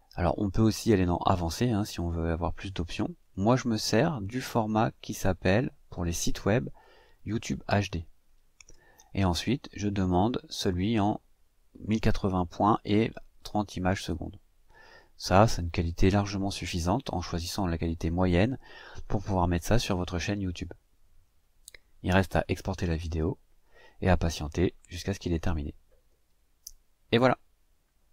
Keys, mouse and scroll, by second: 0.4 click, 3.0 click, 4.5-5.9 drag, 6.6-8.7 drag, 9.6-12.7 scroll up 1, 12.7-15.3 drag, 22.1-22.5 scroll up 1.